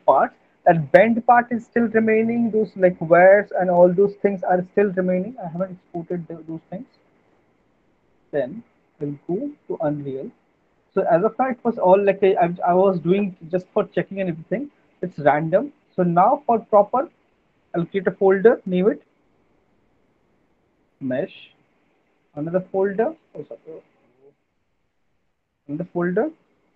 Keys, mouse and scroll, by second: 8.7 click, 11.6 click, 14.5 right click, 17.4 click, 19.4 m, 21.7 right click, 21.7 typing, 22.8-23.5 typing, 23.0 click, 24.3 click, 24.8 click, 26.4 typing.